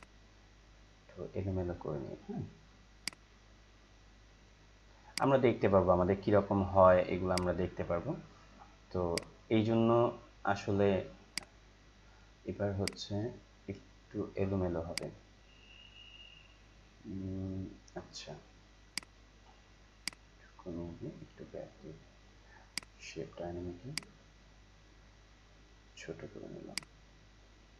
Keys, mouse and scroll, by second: 24.2-26.1 drag, 27.0-27.7 drag.